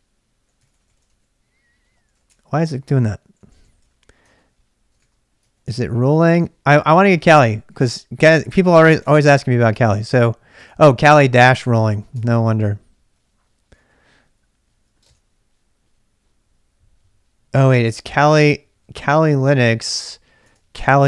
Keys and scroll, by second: 0.0-14.5 typing, 15.0 super+Tab, 17.5 super+Tab, 19.5 super+Tab, 20.4 super+Tab, 20.8-21.0 typing.